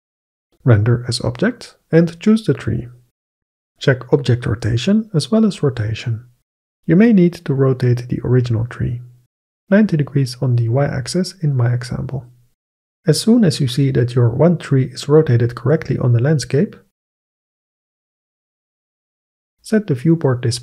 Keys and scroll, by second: 7.5 r, 8.1 y, 10.1 9, 10.2 0.